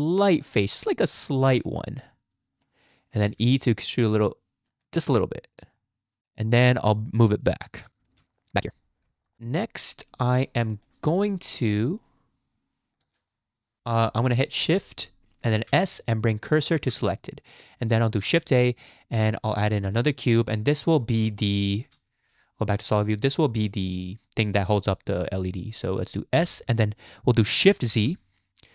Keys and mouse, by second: 1.4 shift+click, 2.2 click, 3.3 e, 5.1 Tab, 5.8-6.2 drag, 6.5 click, 7.2 click, 7.7 g, 9.4-9.8 drag, 9.8-10.9 middle drag, 11.2 shift+middle drag, 11.5-12.0 middle drag, 12.9 click, 14.2 shift+click, 15.7 shift+s, 18.3 shift+a, 21.1 middle click, 21.8 shift+middle click, 22.3 z, 26.3 s.